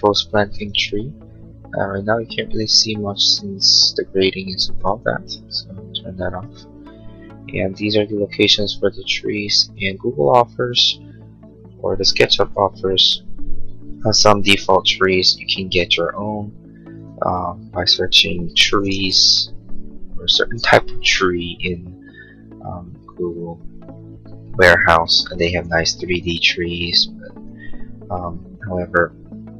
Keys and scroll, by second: 20.5 Return.